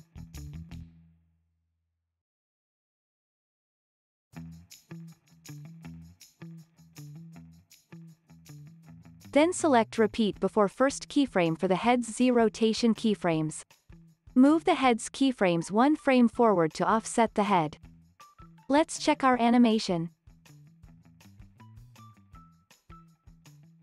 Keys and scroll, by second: 1.2 super+c, 1.4 super+v, 8.9 super+s, 16.9 alt+w.